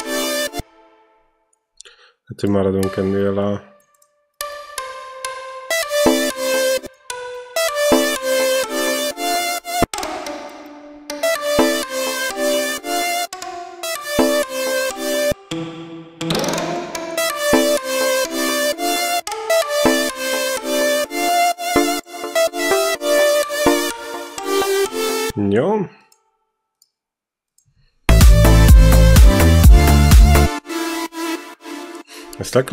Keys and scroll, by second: 0.4 space, 5.5 space, 9.6 space, 11.0 space, 13.1 space, 15.1 space, 17.0 space, 19.0 space, 25.1 space, 27.9 space, 30.3 space, 30.5 e.